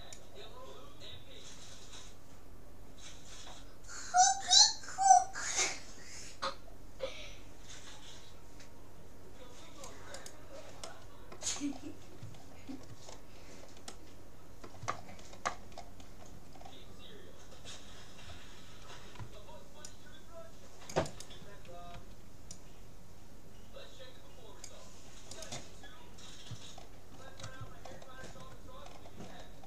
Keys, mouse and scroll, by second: 10.4-12.0 right drag, 10.8-18.2 middle drag, 18.2 click, 19.2 c, 22.0 c, 25.8-29.6 middle drag.